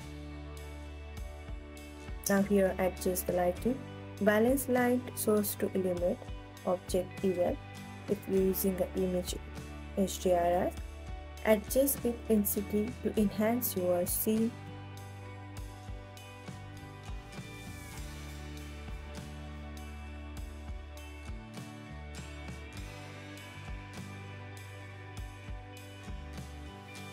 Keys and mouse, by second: 1.5 click, 3.7-5.9 drag, 5.0 KP_0, 7.4 click, 8.9-10.7 middle drag, 9.9 KP_0, 13.2 click, 15.6 click, 18.6 click, 19.4 click, 21.6 click.